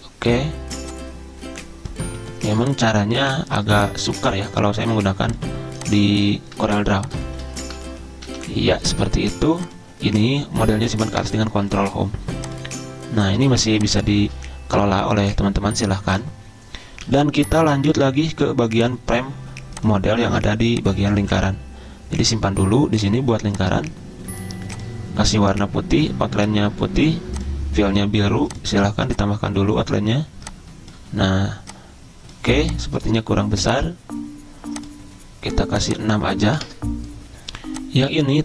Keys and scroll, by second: 7.5 b, 8.3 c, 11.3 ctrl+Home, 14.3 ctrl+z, 17.1 z, 36.5 6, 36.7 Return.